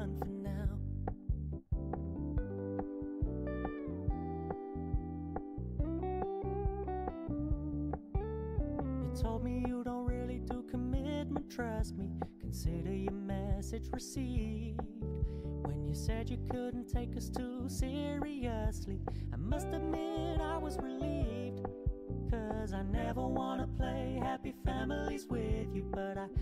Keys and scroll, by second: 6.3 ctrl+d.